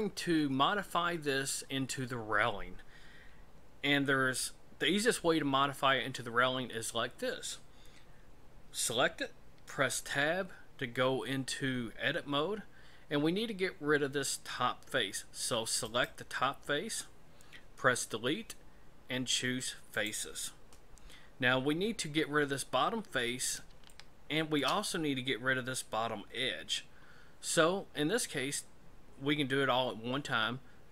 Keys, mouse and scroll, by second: 9.8 Tab, 15.8 right click, 17.8 Delete, 23.3-23.6 scroll up 2, 23.9 shift+middle click, 27.1-30.0 scroll down 1.